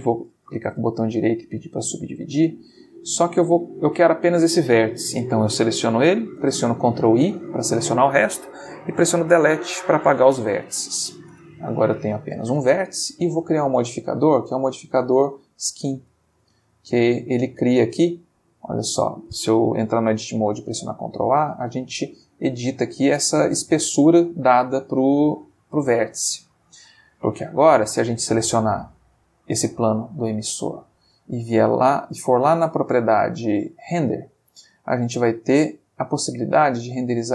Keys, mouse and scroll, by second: 0.5 right click, 1.6 click, 3.3 click, 6.4 ctrl+i, 8.4 Delete, 9.7 Return, 11.3 Tab, 12.0 click, 13.3 click, 14.0 click, 15.6 click, 16.3-17.1 ctrl+middle drag, 17.8 Tab, 18.5 a, 20.0 ctrl+a, 23.5 click, 23.9 Tab, 25.0-25.5 ctrl+middle drag, 25.9-26.5 ctrl+shift+middle drag, 27.5 click, 30.8 click, 31.3 middle click, 33.1-33.9 middle drag, 34.5 click, 36.5 click.